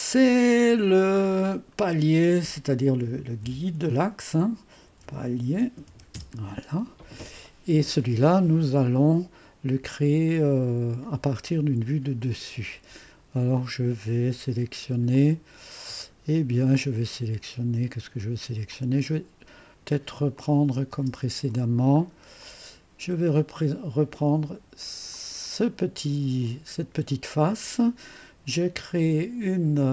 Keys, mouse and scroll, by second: 0.0-0.3 typing, 1.1 click, 2.3 F2, 2.7-6.3 typing, 9.8-10.9 drag, 13.5-17.8 drag, 18.7-20.0 drag, 20.4 click, 20.9 space, 25.1 click, 26.5-27.5 scroll down 1.